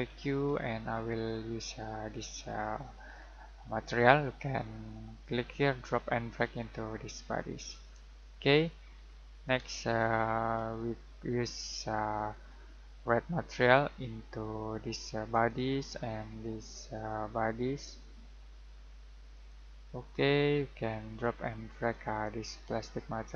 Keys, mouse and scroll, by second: 5.2 click, 8.8 scroll down 1, 9.0-9.5 scroll up 1, 12.1-15.2 scroll down 1, 15.3 click, 19.3 click, 21.9 click.